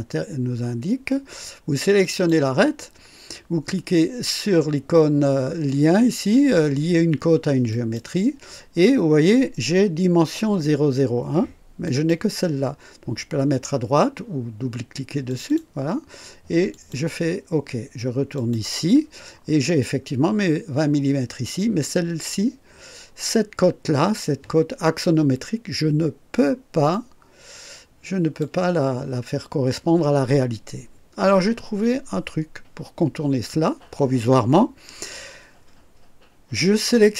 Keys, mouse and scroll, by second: 2.0 click, 7.7 click, 11.8 click, 15.2 click, 16.7 click, 18.3 click, 26.9-28.5 drag.